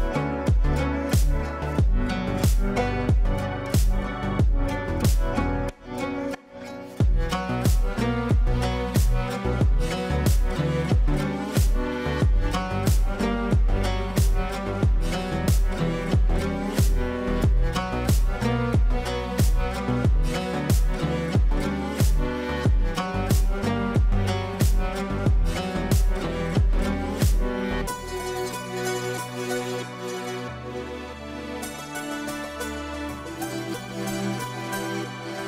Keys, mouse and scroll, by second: 5.2 alt+e, 5.6 m, 6.2 Return, 7.3 click, 10.4 right click, 11.6 click, 14.3 click, 16.1-16.9 typing, 18.1-19.7 typing, 21.2-28.9 drag, 29.8-30.3 typing, 30.7 click, 35.1 shift+click.